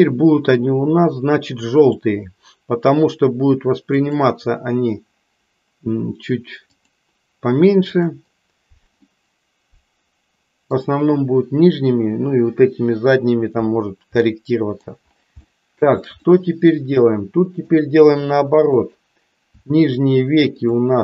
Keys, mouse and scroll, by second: 1.7 click, 4.0-7.0 drag, 7.9 click, 9.1-10.9 middle drag, 14.3 middle click, 15.6 shift+middle click, 16.3-17.8 middle drag, 19.7 shift+click.